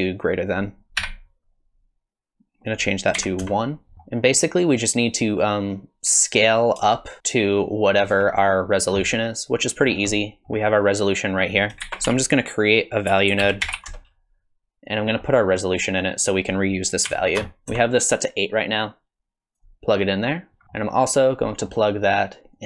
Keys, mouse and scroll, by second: 0.2 click, 2.7 click, 3.9 click, 3.9 middle click, 6.4 click, 9.9-10.3 scroll down 3, 10.1 middle click, 11.5 click, 11.8 shift+a, 15.2-16.2 scroll up 5, 16.2 click, 18.8 click, 20.6 ctrl+z, 20.6 middle click, 20.6 scroll down 3, 21.5 middle click, 22.5 click.